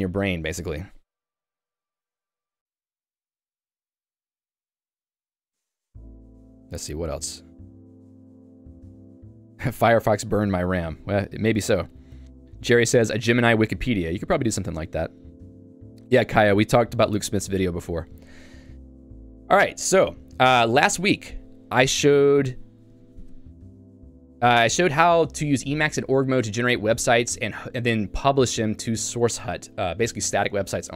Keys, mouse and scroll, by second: 19.5 click.